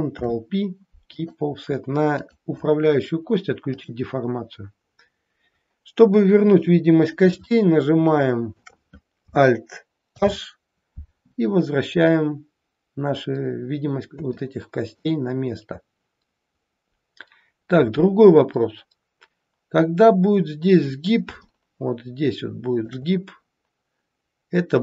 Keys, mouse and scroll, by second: 0.1 ctrl+p, 2.2 click, 3.7 click, 4.6-6.5 scroll down 6, 6.5-7.2 scroll down 2, 6.5 KP_1, 7.5 shift+middle click, 10.1 alt+h, 12.0-12.6 scroll up 2, 12.6-13.1 scroll down 1, 14.4 shift+middle click, 16.6-17.2 scroll up 1, 20.9-21.2 scroll up 2, 21.5 shift+middle click, 24.7 click.